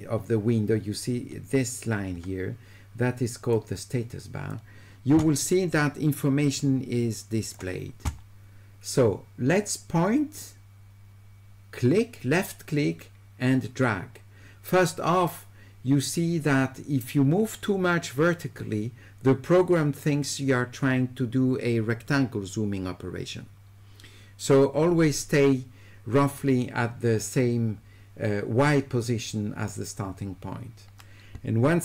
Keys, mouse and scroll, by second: 3.5 click, 6.6 click, 10.4-31.8 drag.